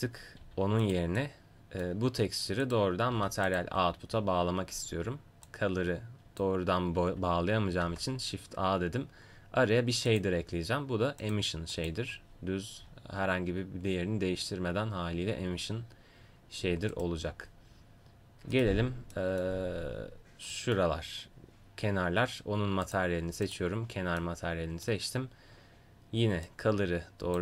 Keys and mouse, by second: 0.4 g, 2.6-5.1 right drag, 3.1 g, 5.5-7.9 drag, 7.9 shift+a, 11.9-16.9 drag, 16.9-19.1 right drag, 19.1 middle click, 20.7 middle click, 22.9-27.4 drag.